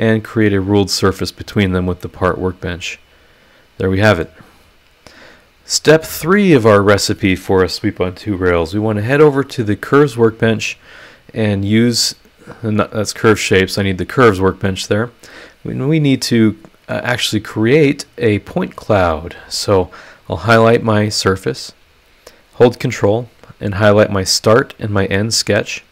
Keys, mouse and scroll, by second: 2.0-4.4 middle drag, 2.1 click, 4.5 click, 9.2 click, 10.7 click, 11.4 click, 13.2 click, 14.4 click, 15.0 click, 20.2 click, 23.1 ctrl+click, 24.5 ctrl+click.